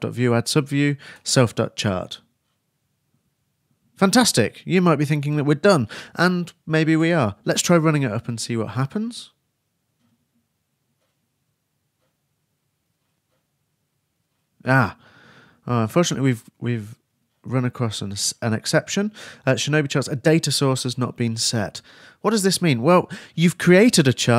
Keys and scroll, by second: 0.0-0.2 typing, 0.4 shift+Return, 9.9 super+s, 10.3 super+r.